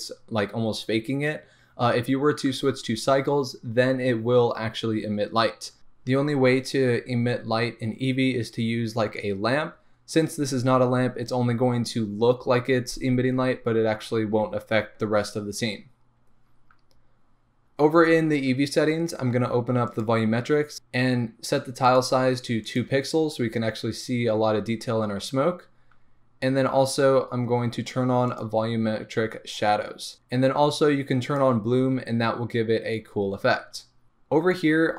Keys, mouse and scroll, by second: 31.4 click.